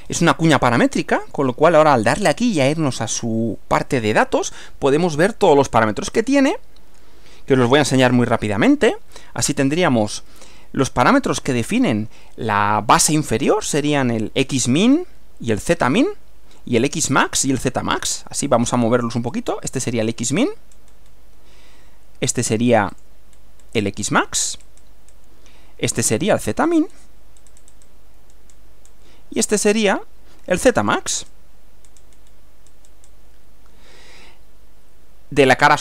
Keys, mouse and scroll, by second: 0.8 middle click, 2.2 click, 6.2 click, 18.7 click, 19.3 scroll up 2, 19.9-20.5 scroll up 4, 20.8-21.3 scroll down 2, 23.0 click, 23.4-24.0 scroll down 4, 24.5-24.8 scroll up 2, 24.8-25.3 scroll down 2, 26.3 click, 26.7 scroll down 2, 27.4-28.1 scroll up 2, 28.5-29.1 scroll down 4, 29.7 scroll up 2, 30.9 click, 31.3 scroll up 2, 31.9-32.5 scroll down 2, 32.7-33.3 scroll up 2, 34.3-35.7 middle drag.